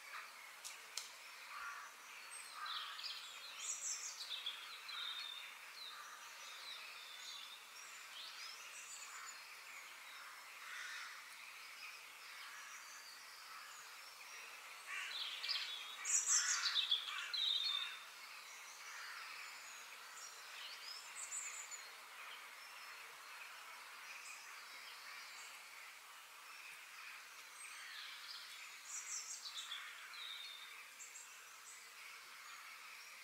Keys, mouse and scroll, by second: 7.9-10.7 middle drag, 10.7 g, 13.8 KP_3, 14.8-16.5 middle drag, 17.3 click, 18.3 click, 19.0 f, 25.1-27.0 middle drag, 27.8-30.7 middle drag, 30.7 g.